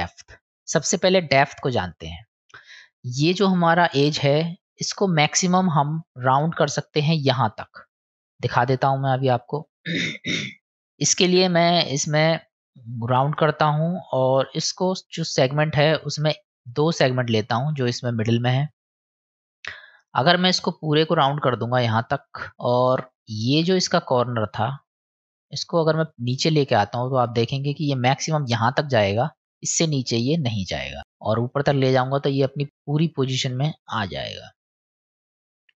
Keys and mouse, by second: 2.4 middle click, 8.2 middle click, 12.3-13.4 drag, 14.7-16.0 drag, 16.6 click, 20.4-21.8 drag, 25.5-27.6 drag, 31.0 click, 34.0-35.7 drag.